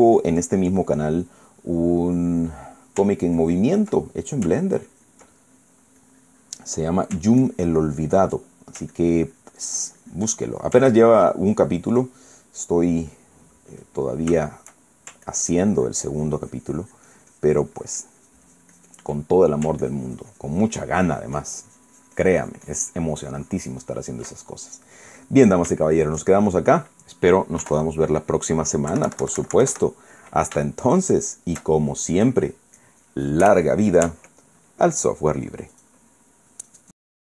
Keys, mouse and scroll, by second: 1.3-3.1 ctrl+middle drag, 3.3 middle click, 4.1 ctrl+click, 5.4 ctrl+click, 6.0 ctrl+middle click, 6.7-7.8 drag, 8.1-9.6 ctrl+drag, 9.9-11.5 ctrl+drag, 11.6-12.8 ctrl+drag, 12.8 ctrl+middle click, 13.3-14.3 ctrl+middle drag, 14.8 shift+middle click, 16.0-19.9 ctrl+drag, 20.0 ctrl+middle click, 20.5-25.0 ctrl+drag, 25.2-28.0 ctrl+middle drag, 28.3 KP_1, 29.6 KP_Subtract, 31.4-32.4 shift+middle drag, 32.4 shift+middle click, 36.4 click.